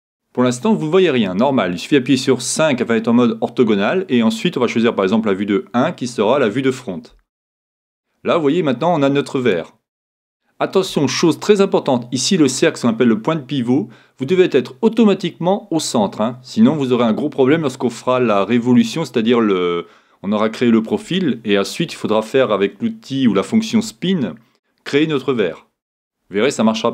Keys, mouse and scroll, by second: 0.0 click, 8.6-10.5 scroll down 1, 10.5 scroll down 1, 10.6-11.1 scroll up 1.